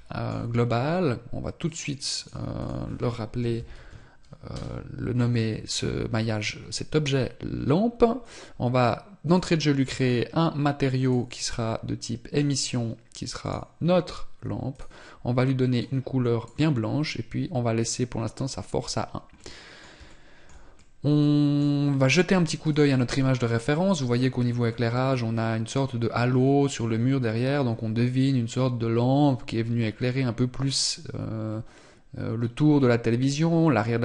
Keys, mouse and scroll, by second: 1.5 click, 2.0 click, 8.1 click, 14.5 click, 19.2 middle click, 19.9 shift+middle click, 20.6 middle click.